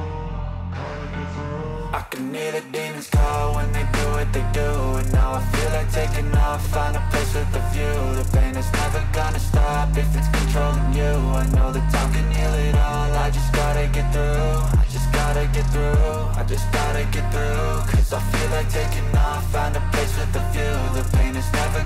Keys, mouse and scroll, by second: 0.0 p, 2.5 click.